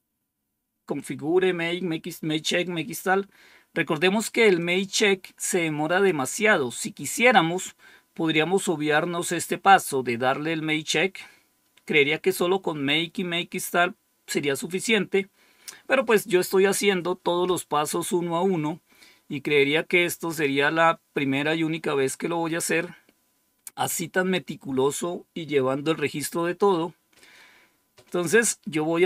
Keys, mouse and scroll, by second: 4.5-6.0 drag.